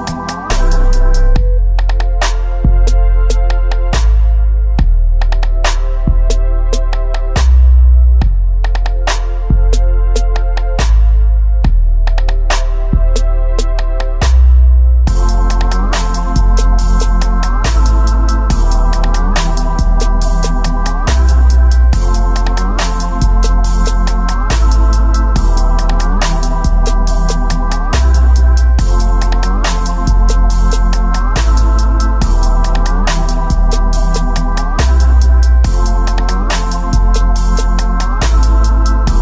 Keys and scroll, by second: 0.0 space, 0.4 space, 2.8 alt+space, 4.8 space, 5.4 space, 5.6 ctrl+z, 7.7 space, 9.9-13.0 typing, 12.9 ctrl+alt+z, 13.9 ctrl+s, 15.1 space, 15.6 space, 16.9-19.7 typing, 18.3 ctrl+z.